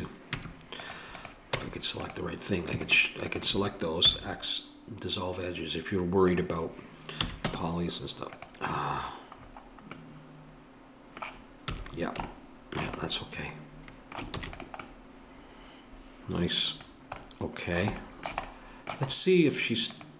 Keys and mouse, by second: 0.4 Tab, 1.2-5.0 drag, 4.1 x, 7.2 a, 7.5 Tab, 11.7 a, 14.3 ctrl+s, 20.0-20.1 drag.